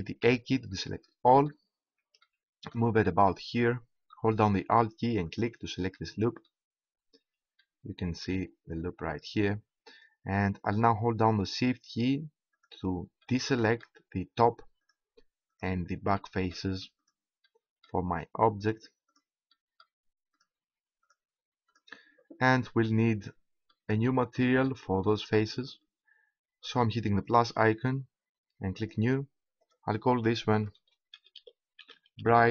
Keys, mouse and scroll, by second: 0.2 a, 0.7-2.3 middle drag, 2.4 middle click, 3.7-5.0 middle drag, 5.3-7.7 right drag, 7.7-10.4 middle drag, 12.5 middle click, 13.0 right click, 13.2 middle click, 14.0 right click, 14.8 middle click, 15.7 right click, 16.2-23.4 right drag, 23.4-24.7 middle drag, 27.2-31.4 drag.